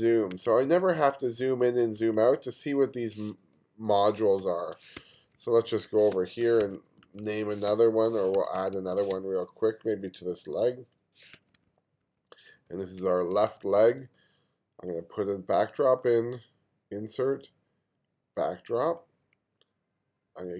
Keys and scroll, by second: 0.3 2, 1.8 1, 3.4 space, 4.4 space, 5.0 2, 6.1 space, 6.6 1, 7.7 space, 8.6 1, 9.1 space, 11.4 2, 13.0 1.